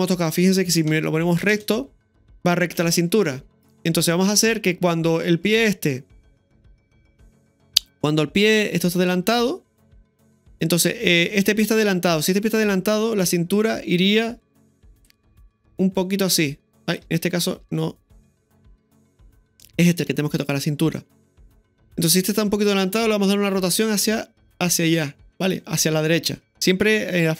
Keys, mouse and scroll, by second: 0.1 middle click, 0.9 KP_1, 1.5 space, 6.5-7.2 drag, 13.4-15.3 right drag, 16.6-17.4 typing, 17.7 ctrl+z, 18.2-18.6 middle drag, 19.3 right click, 19.9-20.4 middle drag, 21.0-21.9 middle drag, 23.7 r.